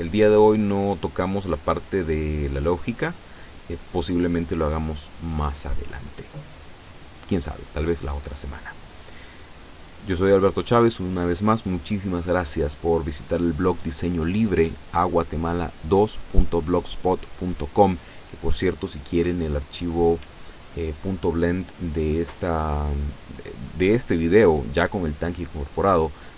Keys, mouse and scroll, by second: 0.3-0.7 scroll down 1, 0.9 scroll up 1, 1.5 scroll up 1, 2.7 click.